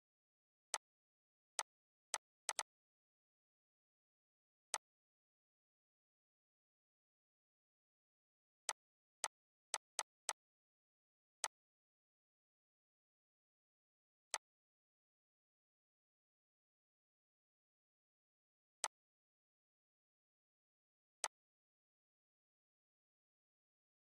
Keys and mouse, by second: 0.3 click, 2.1 right click, 2.2-3.7 drag, 3.7 ctrl+z, 4.3-7.9 drag, 8.3 click, 14.0 click, 15.0 ctrl+z, 18.5-20.2 drag, 20.2 ctrl+g, 20.9 click.